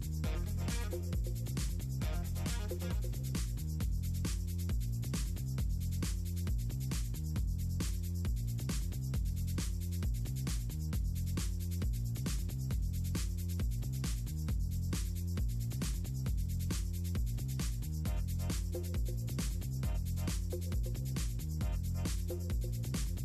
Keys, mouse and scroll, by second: 0.9 ctrl+click, 2.0-5.9 drag, 6.7 ctrl+z, 12.3 click, 16.3 click, 17.0 click, 18.5 click, 22.3 middle click.